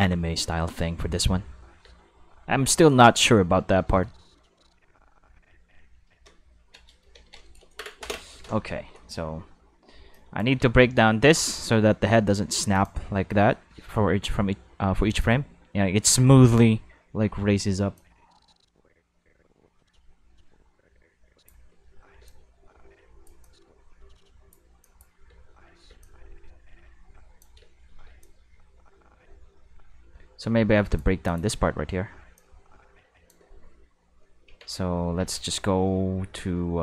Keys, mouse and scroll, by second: 0.7 click, 1.3 space, 1.8 space, 1.9-6.0 drag, 6.5 ctrl+middle click, 6.9 shift+middle click, 7.2 ctrl+middle click, 8.8 q, 10.1 drag, 10.5 space, 11.4 space, 11.8 middle click, 12.7 click, 13.1 space, 14.1 space, 15.0 click, 15.6 space, 16.0 space, 17.9-21.4 drag, 21.6 space, 22.1 space, 22.2-23.2 drag, 23.4-24.5 drag, 24.8 click, 25.2 space, 25.8 space, 26.0-27.3 drag, 27.5 space, 28.0 space, 28.2-30.9 drag, 31.2 click, 31.4 space, 32.1 space, 32.3-33.2 drag, 34.4 Tab, 35.1 q, 36.3 q.